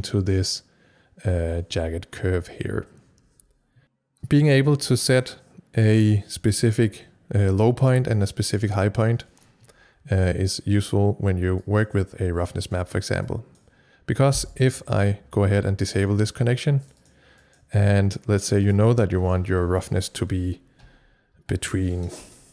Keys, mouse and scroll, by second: 3.8 click, 11.7 click, 13.2 click, 14.5 right click, 15.8 click, 16.8 click, 16.9 double click, 17.4 click, 18.4 click, 18.6 double click, 22.2-22.5 typing.